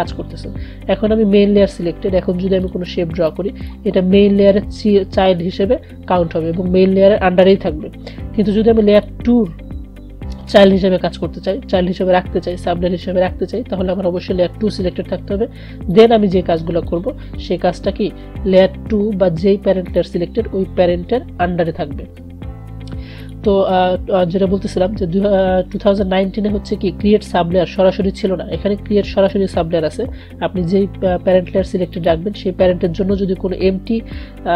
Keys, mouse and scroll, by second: 2.8-6.3 drag, 9.1 click, 16.1-19.6 drag, 19.9 click, 20.0 click, 23.3 click, 32.1 click.